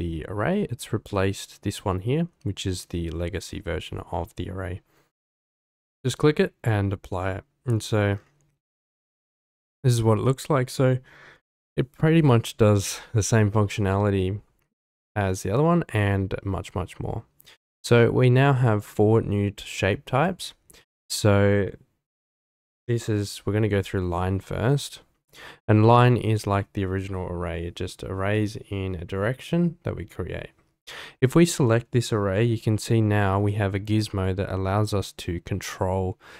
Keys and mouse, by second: 8.7-10.0 middle drag, 18.3-20.2 drag, 21.1-25.3 drag, 30.8 click, 32.8-33.2 shift+middle drag, 33.5-34.0 middle drag, 34.8-36.3 drag.